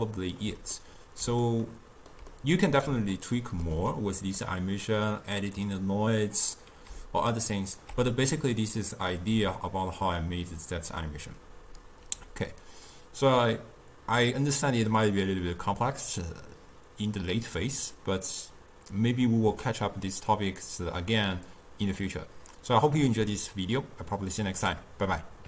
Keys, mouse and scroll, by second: 7.0 d, 7.4 right click, 7.9 d, 8.7 d.